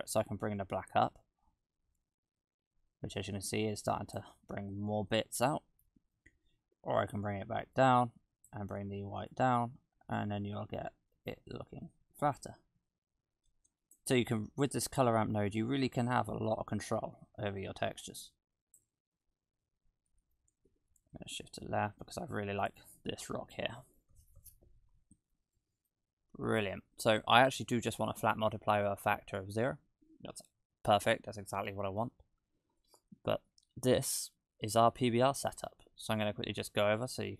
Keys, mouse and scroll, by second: 4.4-5.2 scroll down 5, 5.4 shift+middle click, 7.8 click, 9.3 click, 15.4 click, 19.1-20.3 scroll down 1, 20.7 shift+`, 25.6 middle click, 26.2-27.0 scroll up 3, 27.0-27.9 scroll up 1, 31.4-32.8 scroll down 18, 32.8 middle click, 33.7-34.4 scroll up 6, 34.4 middle click, 35.6-36.5 scroll up 3, 36.5 scroll up 1, 36.7 middle click.